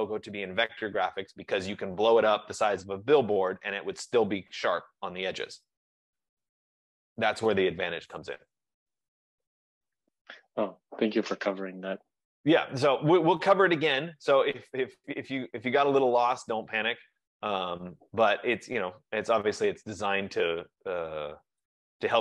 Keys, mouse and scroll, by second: 15.3 click, 18.1 click.